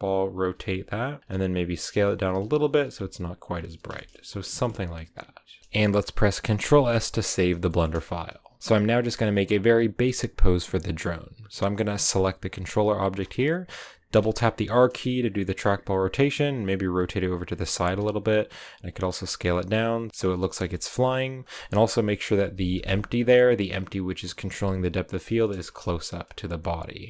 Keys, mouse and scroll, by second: 1.2-2.8 typing, 3.0-3.4 scroll down 2, 3.4-3.8 scroll up 4, 3.8-12.0 shift+middle drag, 12.0-14.0 right drag, 14.1 r, 16.1 r, 17.7 s, 19.0 g, 20.1 g, 20.4 scroll up 2, 20.6 shift+middle click, 21.3 right click, 22.0 KP_Decimal, 22.5 middle click, 22.6-23.2 scroll down 8, 23.2-24.4 middle drag, 24.4 g, 25.6 KP_0.